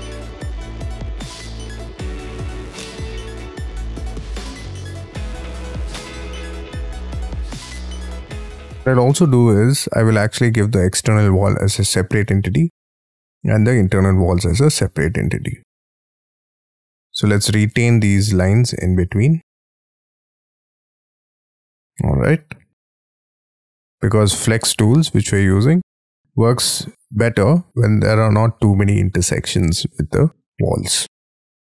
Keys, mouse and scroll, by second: 0.2-0.7 scroll up 17, 1.0 scroll down 6, 1.2-1.6 scroll up 6, 1.6-2.0 scroll down 16, 2.1-3.0 scroll up 13, 3.0-3.5 scroll down 19, 3.6-4.5 scroll up 14, 4.5-5.4 scroll down 19, 5.7 ctrl+z, 6.0 ctrl+z, 6.5-7.0 scroll up 12, 7.1 ctrl+z, 7.3-7.7 scroll down 13, 7.7-8.3 scroll up 10, 8.3-8.9 scroll down 22, 8.9-10.6 scroll up 19, 10.6-11.5 scroll down 16, 11.7-12.0 scroll up 11, 12.0-12.7 scroll down 12, 12.9-14.2 scroll up 17, 14.2-15.3 scroll down 20, 15.3-16.3 scroll up 12, 16.5-16.9 scroll down 9, 17.0-18.4 scroll up 12, 18.4 l, 19.4 double click, 19.5 Escape, 19.9-20.3 scroll down 20, 20.3 scroll up 6, 20.6 scroll down 5, 20.7 scroll up 6, 20.8-21.3 scroll down 14, 21.3 scroll up 4, 21.7-22.2 scroll down 12, 22.4 scroll up 2, 22.7-23.1 scroll down 7, 23.1 scroll up 1, 23.3 space, 23.8 double click, 30.7-31.4 scroll down 3, 31.4-31.7 scroll down 5.